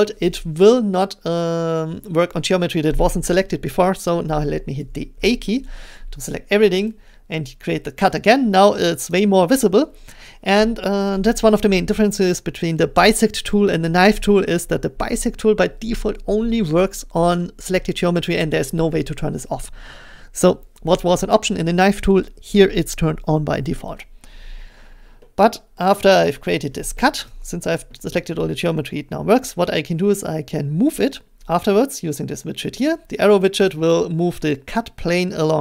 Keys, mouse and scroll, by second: 1.6 middle click, 4.8 a, 9.1-14.2 drag, 26.7 scroll, 27.3 shift+middle click, 32.3 shift+middle click.